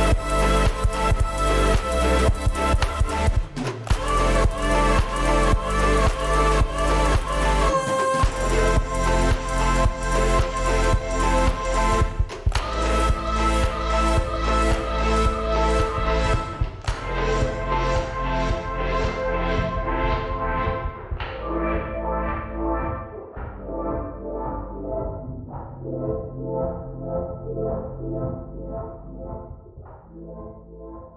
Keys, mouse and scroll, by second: 0.1 middle click, 0.1 space, 0.3 scroll up 4, 0.4 m, 0.8 shift+click, 0.9 scroll down 5, 1.2 middle click, 6.9 scroll down 6, 7.0 middle click, 7.4 shift+middle click, 7.5 shift+middle click, 7.6 shift+middle click, 7.8 middle click, 7.9 middle click, 8.0 scroll down 3, 8.2 shift+middle click, 10.2 shift+middle click, 10.4 middle click, 11.0 middle click, 13.3-15.2 scroll up 5, 13.5 y, 15.5 y, 16.1 middle click, 16.2 y, 16.4 scroll up 1, 16.5 s, 17.0 space, 17.1 scroll, 17.2 scroll up 1, 18.2 shift+click, 18.5 s, 24.2 middle click, 24.4 scroll down 4, 24.4-28.0 typing, 24.8 middle click.